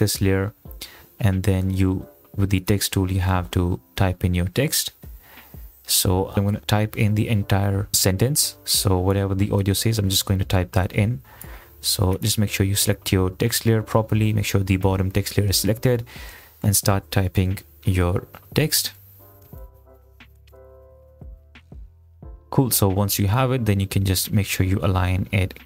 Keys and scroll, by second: 4.8 Right, 16.5-22.1 typing.